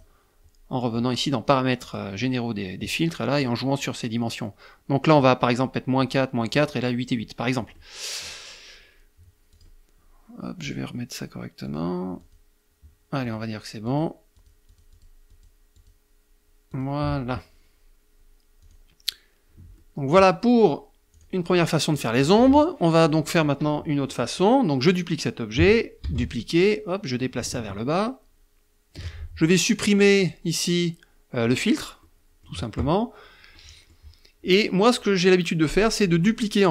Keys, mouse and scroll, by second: 1.1 click, 7.0 middle click, 8.8 click, 9.9 click, 10.9 click, 11.5 click, 12.5 click, 13.1 click, 13.6 click, 14.6 click, 15.0 click, 15.9 click, 17.9 click, 19.0 middle click, 20.4 click, 21.0 middle click, 21.2 click, 21.6 click, 23.3 click, 25.3 ctrl+d, 25.8-28.4 ctrl+drag, 29.4 click, 30.6 click, 31.2 middle click, 32.7 middle click.